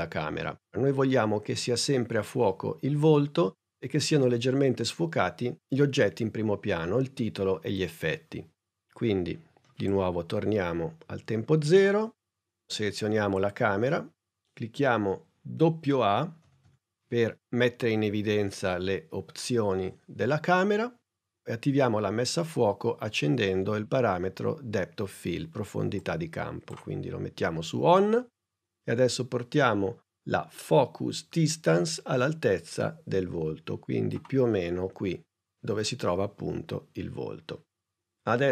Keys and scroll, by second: 16.6 a.